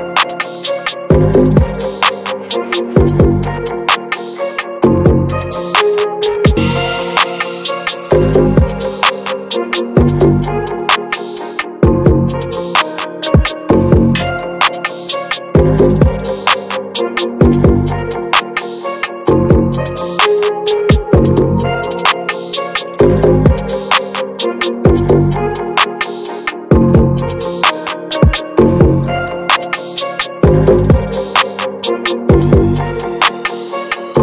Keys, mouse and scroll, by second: 0.6-3.2 ctrl+drag, 3.2-4.3 middle drag, 4.3 ctrl+z, 4.7-5.9 middle drag, 5.9-6.7 scroll down 1, 6.7-7.8 drag, 7.8 ctrl+z, 8.4-9.8 scroll down 2, 9.8-10.9 drag, 10.9 middle click, 11.3 ctrl+z, 11.8 click, 12.3 middle click, 13.0 click, 13.3 middle click, 13.3 scroll up 1, 13.6 middle click, 14.2 ctrl+z, 14.5 middle click, 14.9 ctrl+z, 15.2-16.5 shift+middle drag, 16.5 shift+f, 18.2 click, 18.5 middle click, 19.3 ctrl+z, 19.6-22.7 middle drag, 22.7-32.0 drag, 32.0 middle click, 32.6-34.2 drag.